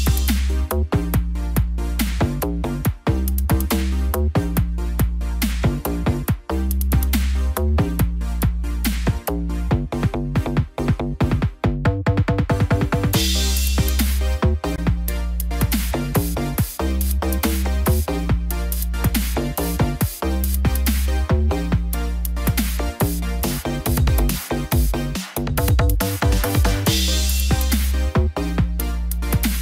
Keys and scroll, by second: 1.6 ctrl+=, 9.2 ctrl+z, 13.7 ctrl+-, 15.0 ctrl+0.